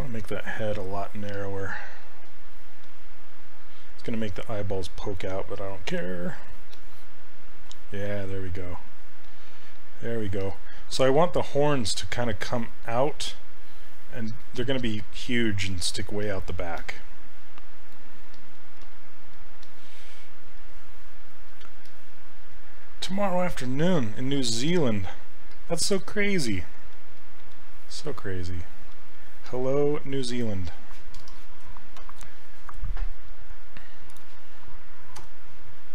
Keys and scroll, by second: 1.3 s, 14.7 s, 18.8 s, 25.9 s, 35.2 e.